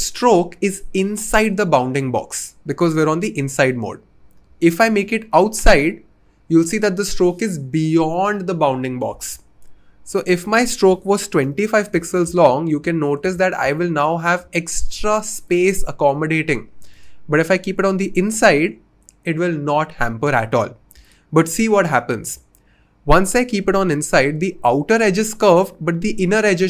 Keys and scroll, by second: 10.8-11.3 typing, 11.4 Return.